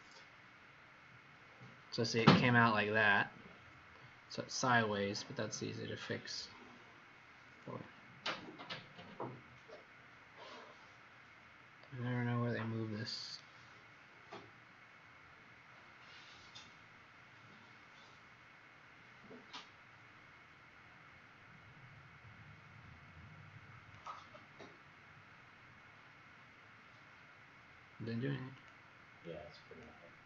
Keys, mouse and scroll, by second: 0.2 click, 2.7-3.3 scroll down 6, 3.3 scroll up 1, 7.4 click, 13.2 right click, 15.4 click, 18.5 click, 20.0 click, 29.2 click.